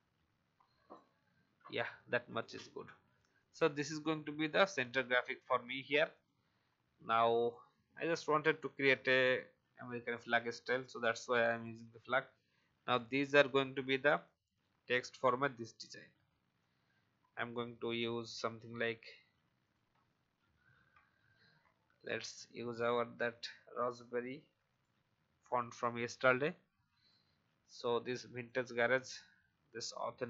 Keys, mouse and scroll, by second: 1.3 alt+v, 1.7 alt+scroll down 1, 2.3 click, 2.7 alt+scroll down 1, 3.3-5.8 drag, 6.1 click, 10.0 click, 10.6 alt+scroll down 1, 11.4-15.4 drag, 15.4-16.5 scroll up 1, 16.5-17.9 drag, 20.3-21.4 typing, 22.2 click, 26.2-29.1 shift+drag.